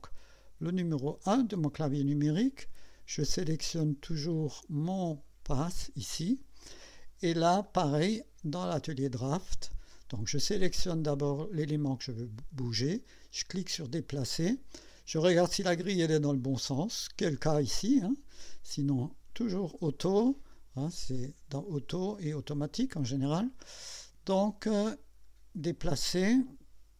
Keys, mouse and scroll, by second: 0.7 KP_1, 4.3 click, 4.8 click, 7.0 scroll up 1, 7.6 right click, 13.7 click, 15.6 scroll down 2, 21.2 click, 22.3 click.